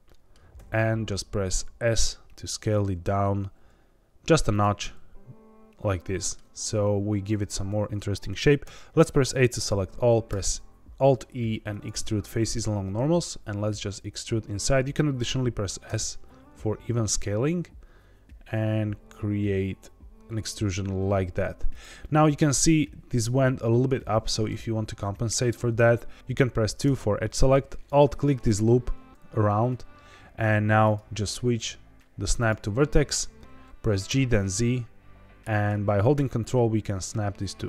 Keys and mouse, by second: 0.0 middle click, 0.5 s, 4.5 click, 4.7-6.3 middle drag, 8.6 a, 10.2 alt+e, 15.8 s, 21.7 click, 21.9 middle click, 23.9 middle click, 24.9 middle click, 26.2 2, 26.2 3, 26.8 2, 27.9 alt+click, 30.9-33.0 drag, 34.0 g, 34.2 z.